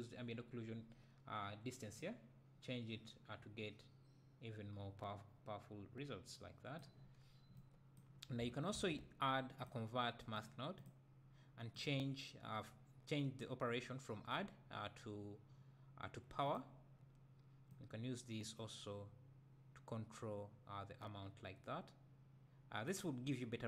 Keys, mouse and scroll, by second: 2.1-7.6 drag, 10.9 click, 16.6-23.6 drag.